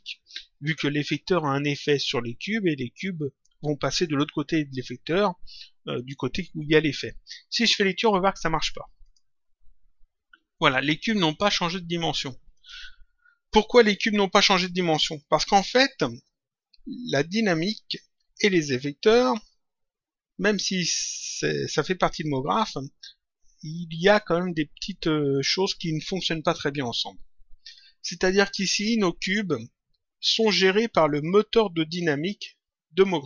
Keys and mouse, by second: 9.0 click, 12.4 click.